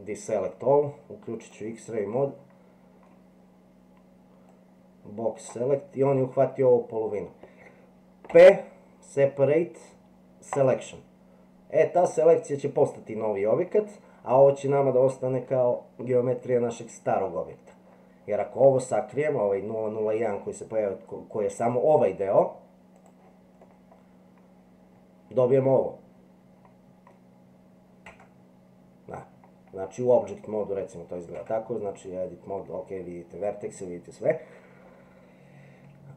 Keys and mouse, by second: 2.2 middle click, 4.5-5.5 drag, 8.3 p, 16.4 click, 23.0 click, 23.7-27.1 middle drag, 28.1 Tab, 29.2 middle click, 31.4 Tab, 32.0 middle click.